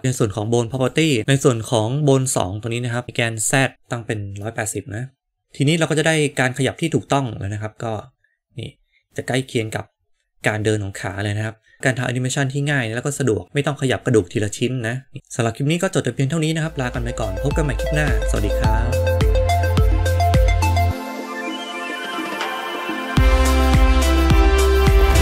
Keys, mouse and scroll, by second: 0.7 click, 1.2 ctrl+z, 4.3-5.4 middle drag, 14.6 click, 14.9 g.